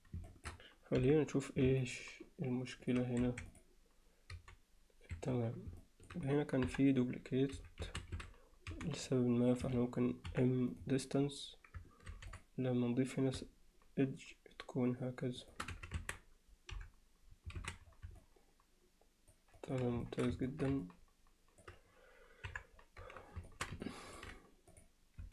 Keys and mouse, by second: 0.3 alt+shift+middle click, 1.0 KP_Divide, 1.8-2.9 alt+middle drag, 3.3 1, 4.3 g, 5.8 alt+middle click, 6.7 KP_1, 7.6 z, 7.9 a, 8.7 c, 10.3 m, 12.1 ctrl+r, 15.7 z, 16.0 Tab, 16.8 KP_Divide, 17.6 alt+a, 18.2-19.3 middle drag, 19.6 alt+middle click, 20.1 alt+shift+middle click, 20.5 ctrl+alt+middle click, 20.8-21.6 alt+middle drag, 22.5 KP_1, 23.5 alt+shift+middle click, 23.8-24.2 ctrl+alt+middle drag, 24.7 click, 25.2 z.